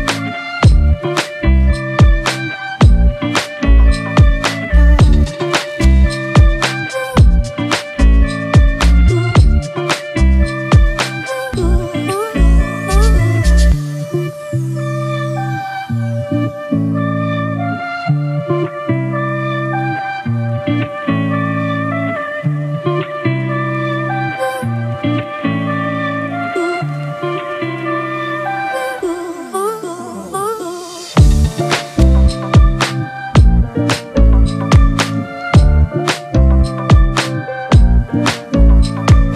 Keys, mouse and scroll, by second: 4.6 alt+shift+click, 7.6 ctrl+t, 9.9 Return, 16.8 ctrl+t, 17.8 ctrl+-, 18.0 ctrl+-, 19.0 ctrl+-, 19.4 alt+shift+click, 20.2 alt+shift+click, 23.7-24.7 alt+scroll up 1, 27.7 Return, 38.8 ctrl+z.